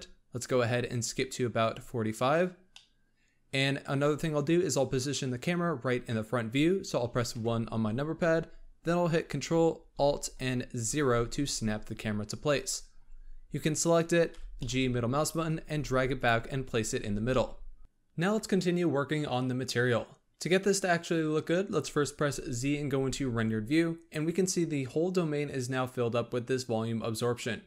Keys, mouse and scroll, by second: 1.9 click, 2.6-3.9 middle drag, 3.9-7.3 scroll up 2, 7.3 KP_1, 10.7 ctrl+alt+KP_0, 12.5 click, 13.0-14.3 scroll up 4, 14.3 g, 15.4 scroll up 1, 15.6 g, 16.3-17.0 scroll down 3, 17.0 g, 17.8-20.0 scroll down 1, 21.4-22.2 scroll up 1, 22.2 z.